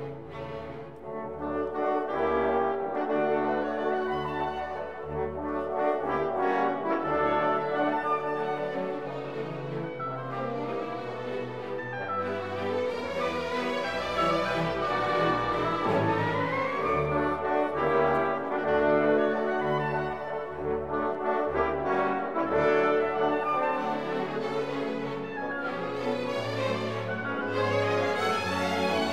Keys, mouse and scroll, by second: 11.2-16.3 drag, 16.3-29.1 ctrl+shift+middle drag.